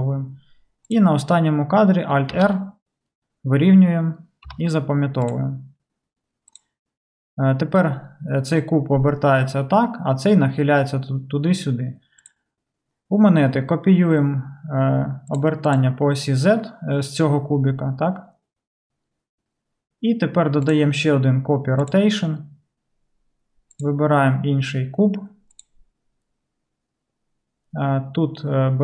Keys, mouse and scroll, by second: 0.9-12.3 drag, 2.3 alt+r, 4.5 alt+r, 5.3 i, 12.3-15.4 middle drag, 15.4 click, 15.5 middle click, 15.8 click, 15.8-20.7 middle drag, 20.7-28.8 drag.